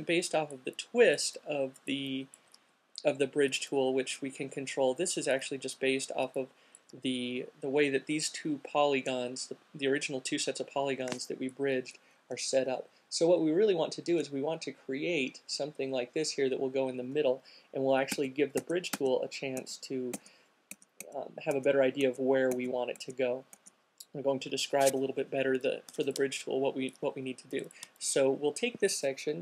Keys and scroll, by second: 17.1 super+z, 19.1 super+z, 19.9 super+z, 20.4 super+z, 21.1-21.6 super+z, 23.2 super+z, 23.7 super+z, 25.6 q.